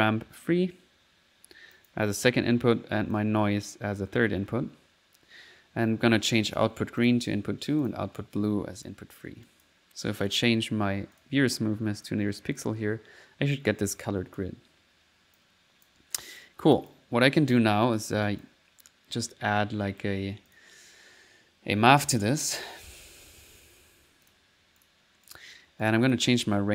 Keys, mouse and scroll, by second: 0.3 middle click, 1.8 click, 2.2 click, 2.3 middle click, 3.1-4.2 drag, 4.2 click, 6.5 click, 7.0 click, 7.8 click, 8.8 click, 9.5 click, 9.8 click, 10.3 click, 11.2 click, 12.0 click, 12.6 middle click, 14.1 click, 15.4 click, 16.2 click, 16.8 click, 17.4-18.8 drag, 22.8 right click, 23.0-23.7 typing, 24.3 click, 24.9 click, 25.3 click, 25.9 click.